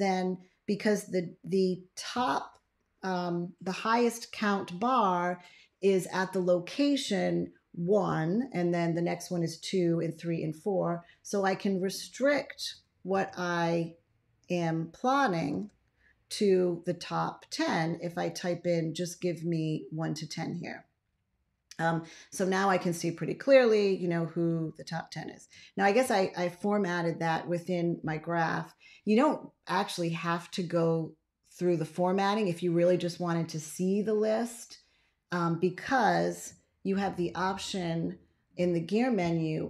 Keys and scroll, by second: 12.6-13.6 typing, 15.3 5, 15.7 Return, 25.7 ctrl+x, 36.8 ctrl+a, 37.2 ctrl+a.